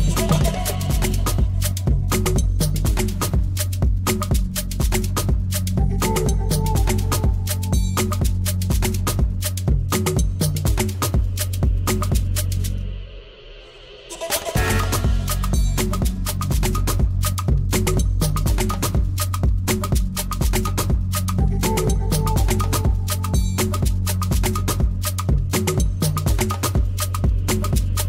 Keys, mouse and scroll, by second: 0.7 middle click, 2.6 drag, 4.7-8.8 drag, 10.4 alt+middle click, 10.8 alt+b, 13.3 middle click, 14.3-14.6 scroll up 3, 14.6 middle click, 15.1 scroll up 2, 15.4 middle click, 16.2 scroll up 1, 20.8 click, 21.4 click, 22.6 scroll down 3, 22.8-23.2 middle drag, 23.8 alt+b, 24.2 scroll down 2, 24.3-24.6 middle drag, 24.9 shift+middle click, 25.3 scroll up 2.